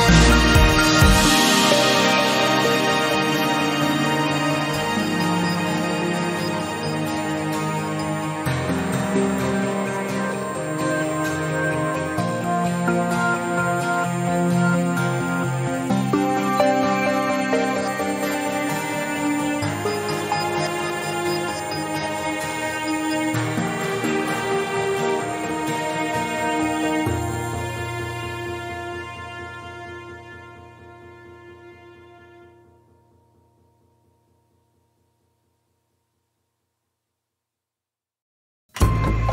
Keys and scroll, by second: 5.5 Tab, 17.1 ctrl+b, 32.9 ctrl+b, 39.0 Tab.